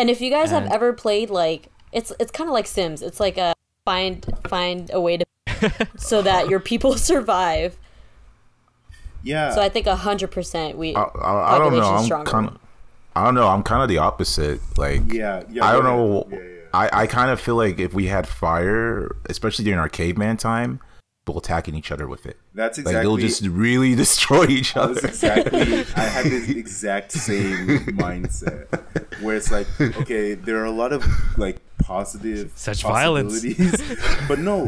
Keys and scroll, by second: 1.3 -, 3.5 space, 6.5 -, 14.8 -, 21.0 space, 26.7 -, 31.2 r.